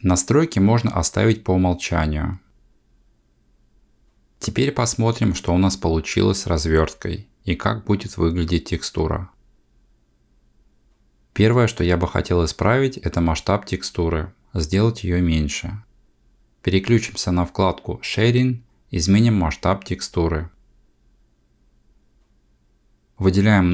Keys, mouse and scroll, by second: 19.0 click.